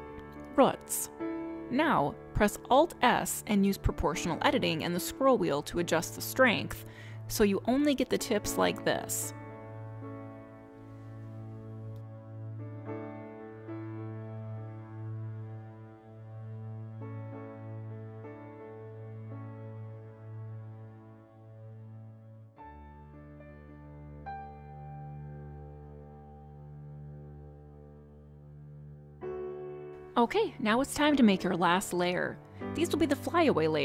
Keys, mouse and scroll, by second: 0.3 click, 2.5 middle click, 3.2-3.6 scroll up 3, 3.6 shift+middle click, 4.1 scroll up 2, 5.5 alt+s, 13.4-13.9 scroll down 2, 13.9 middle click, 19.4 alt+s, 25.5 middle click, 26.1 scroll up 1, 26.7 middle click.